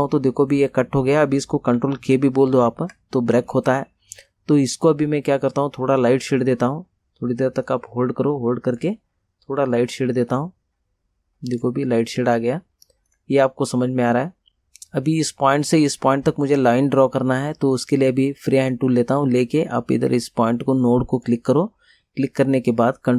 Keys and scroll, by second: 2.1 ctrl+k.